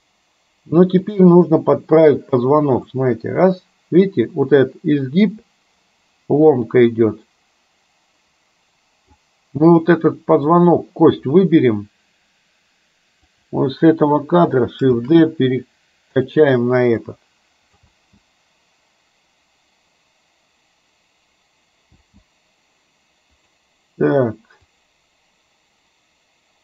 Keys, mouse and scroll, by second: 1.2 click, 3.0-9.2 drag, 10.7 click, 13.4 click, 15.0 shift+d, 17.2-18.0 drag, 18.0 space, 22.0 space, 23.5 click, 24.8-26.6 drag.